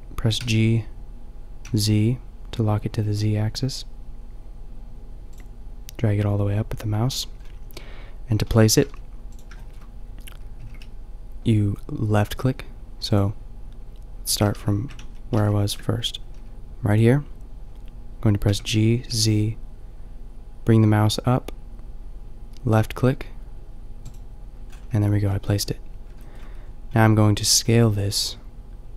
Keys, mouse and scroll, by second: 0.3 g, 8.7 g, 10.6 g, 14.4 ctrl+z, 18.4 g, 24.6-26.1 drag, 26.2-28.9 middle drag.